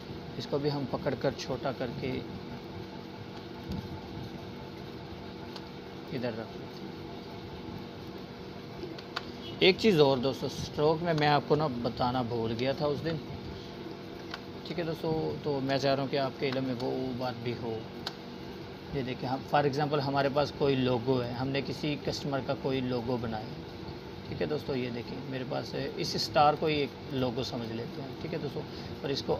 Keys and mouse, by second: 5.0 space, 5.7 click, 5.8-6.7 space, 10.0 space, 10.3 click, 10.6-11.4 space, 12.2 space, 12.6 click, 12.7-13.5 space, 15.6 right click, 16.5-21.5 drag.